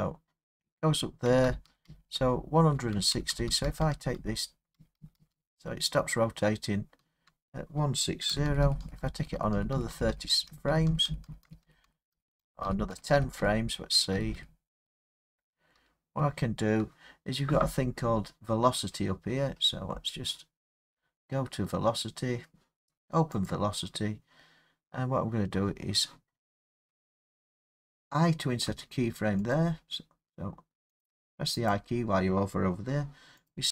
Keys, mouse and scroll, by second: 1.3 Left, 1.5 Left, 1.7 Left, 1.9 Left, 2.0-2.8 Left, 3.0 Left, 3.1 Left, 3.4 Left, 3.5 Left, 3.7 Left, 4.0 Left, 4.2 Left, 4.8 Left, 5.0 Left, 5.2 Left, 5.3-6.7 Left, 8.3 Right, 8.5 Right, 8.6 Right, 8.8 Right, 9.0 Right, 9.2 Right, 9.4 Right, 9.6 Right, 9.8 Right, 9.9 Right, 10.1 Right, 10.3 Right, 10.5 Right, 10.7 Right, 10.9 Right, 11.1 Right, 11.3 Right, 11.5 Right, 11.6 Right, 11.9 Right, 12.1 Right, 12.4 Right, 12.6 Right, 12.9 Right, 13.2 Right, 13.4 Right, 14.2 Right, 14.4 Right, 16.2 Left, 18.8-20.3 scroll, 20.3 middle click, 20.4 middle click, 20.7 middle click, 22.1 middle click, 23.5 click, 28.7 i, 29.5 click, 31.0 click, 31.7 click, 33.4 click.